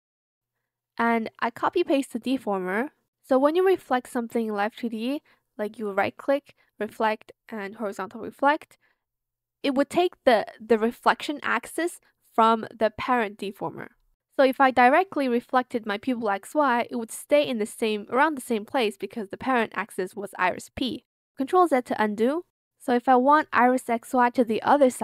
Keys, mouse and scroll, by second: 1.5 ctrl+c, 2.0 ctrl+v, 19.5 ctrl+z, 20.1 ctrl+z, 21.4 ctrl+shift+z, 24.9 z.